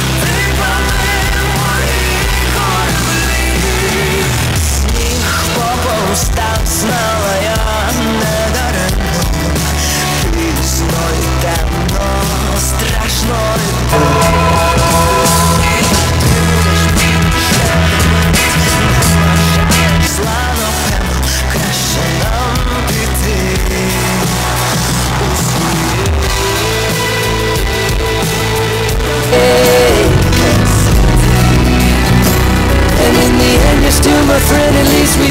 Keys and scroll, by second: 0.3-0.7 Down, 2.0 Down, 2.0 Return, 20.7 Page_Down.